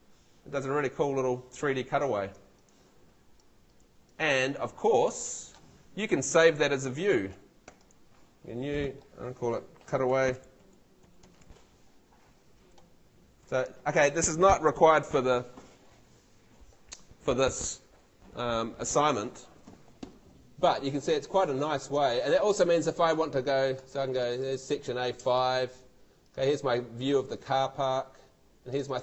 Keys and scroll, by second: 9.6-11.9 typing.